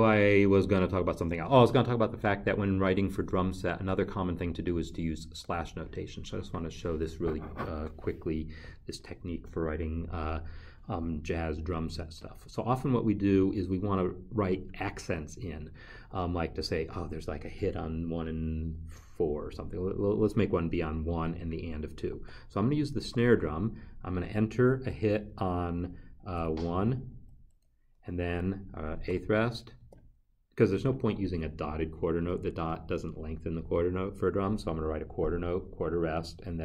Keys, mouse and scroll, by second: 16.1 n, 22.1 n, 23.0 5, 26.4 a, 29.8 0.